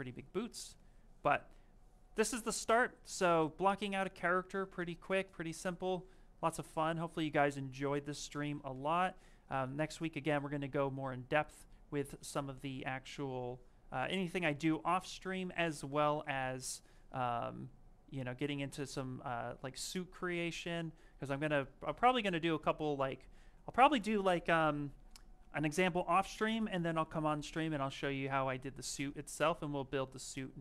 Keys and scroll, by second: 6.6 s, 12.7 s, 20.6 s.